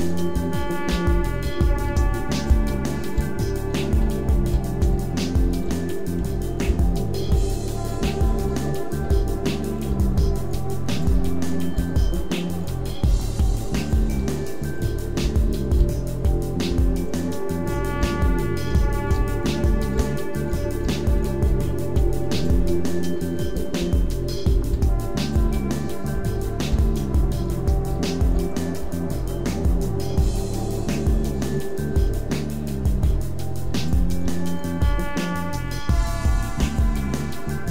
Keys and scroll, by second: 0.0-16.7 typing, 18.0-22.4 typing, 23.6-28.8 typing, 30.2 g, 30.9 e, 33.6 e, 34.2 e, 35.9 e, 36.6 e.